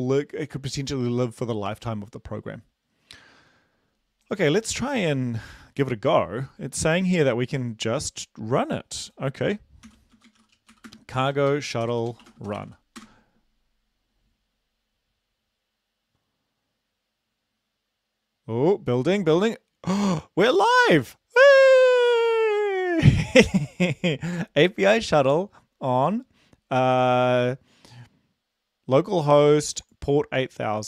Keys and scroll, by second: 6.0 ctrl+`, 9.9 ctrl+l, 10.2-12.7 typing, 13.0 Return.